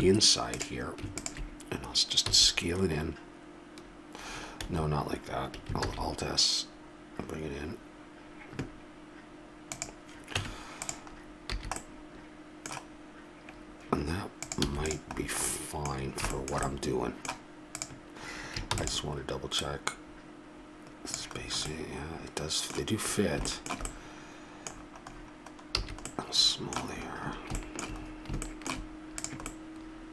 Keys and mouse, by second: 2.3 s, 5.9 alt+s, 10.4 Tab, 11.6 a, 14.6 x, 15.2-16.2 middle drag, 17.9 right click, 18.7 shift+d, 21.6 middle click, 26.1 a.